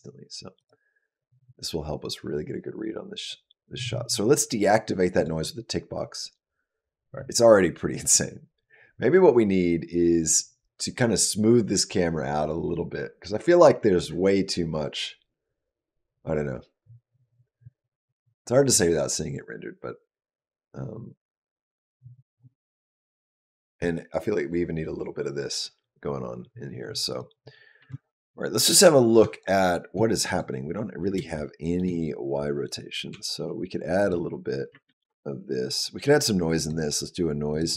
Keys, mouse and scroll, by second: 0.4 click, 5.0 click, 26.9 click, 27.6 space, 29.1 shift+click, 30.1 click, 31.2 shift+middle click, 32.5 click, 32.9 g, 34.7 ctrl+z, 36.4 click.